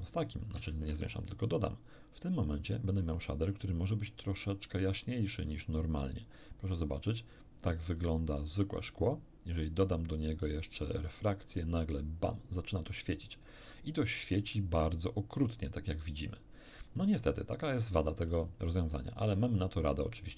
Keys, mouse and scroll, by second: 0.0 click, 0.7 shift+a, 2.2 click, 3.1 click, 3.9-4.8 drag, 5.5-6.4 drag, 7.0-7.9 drag, 9.6-11.3 drag, 14.5-15.5 middle drag, 15.9 middle click, 16.7 middle click, 17.7 middle click, 18.0 middle click, 18.6 middle click.